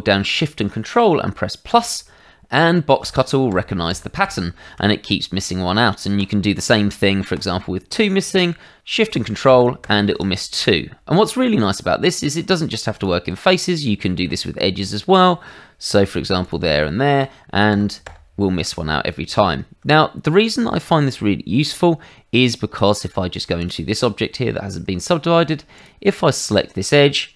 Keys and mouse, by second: 6.1 click, 6.5 click, 7.3 shift+click, 11.6 Tab, 12.9 click, 13.3 Tab, 14.8 click, 16.4 shift+click, 20.6 shift+middle click, 22.1 Tab, 23.1 shift+middle click, 23.6 click, 23.9 middle click, 24.3 Tab, 25.7 click, 26.2 shift+middle click.